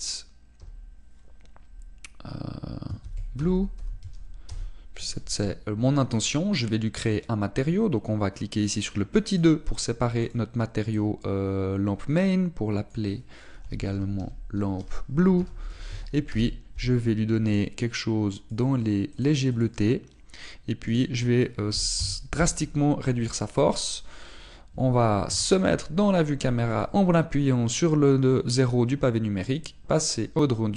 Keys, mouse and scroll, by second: 10.3 click, 10.3-13.8 scroll up 2, 19.5 click, 22.9 click, 26.3 KP_0, 27.7 click.